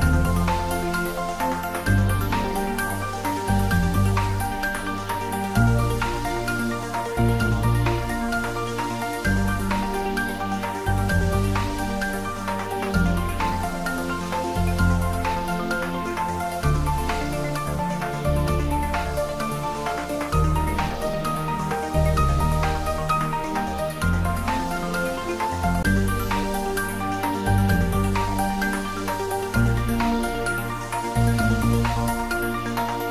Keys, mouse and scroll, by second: 0.3 scroll up 1, 1.1 middle click, 1.7 scroll up 1, 2.7 middle click, 3.4 scroll up 1, 4.4-8.8 drag, 15.7 click, 17.6-18.6 typing, 19.7 5, 20.3 Return, 21.7 scroll up 1, 24.1 right click, 24.8 click, 26.0-26.3 scroll down 1, 27.0 click, 29.1-30.7 typing, 31.1 Return.